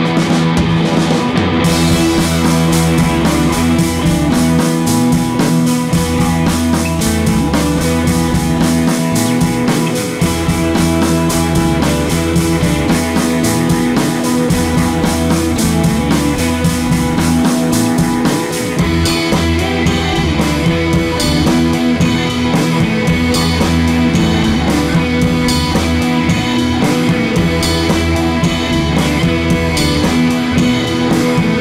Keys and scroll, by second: 16.0 Tab, 16.2 Down, 19.5 Down, 21.5 4, 21.7 Return, 25.0 super+d, 28.1 Down.